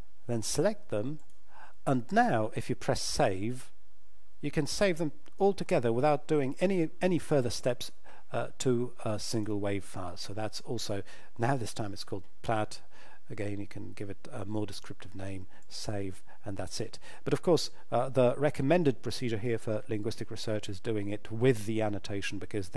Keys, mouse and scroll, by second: 1.2 shift+click, 3.0 click, 9.3 click, 15.6 click.